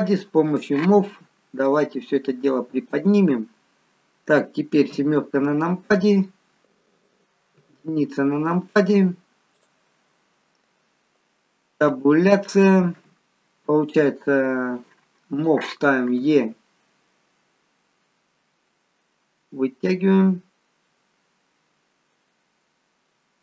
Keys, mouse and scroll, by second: 0.4 click, 1.6 click, 4.8 KP_7, 7.6 KP_1, 11.7 Tab, 15.3 click, 16.2 e.